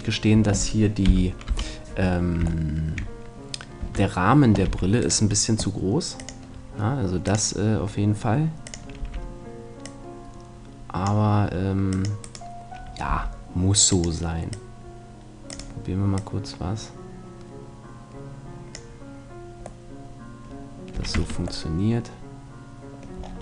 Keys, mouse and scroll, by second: 0.4 Tab, 1.1 KP_3, 1.5 KP_1, 2.1 middle click, 3.9 Tab, 4.5 middle click, 4.7 c, 5.1-6.7 right drag, 6.2 click, 6.8-10.5 drag, 9.0 c, 12.3-14.2 right drag, 13.1 c, 15.5-18.1 drag, 19.9-21.2 middle drag, 21.0 a, 21.2 Tab.